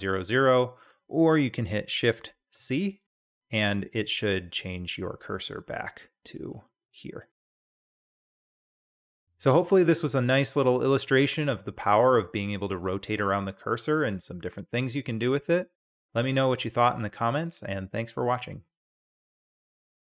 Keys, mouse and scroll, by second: 2.5 shift+c, 5.3-6.5 middle drag, 7.3 shift+drag, 7.4-8.0 shift+middle drag, 9.1-9.5 drag.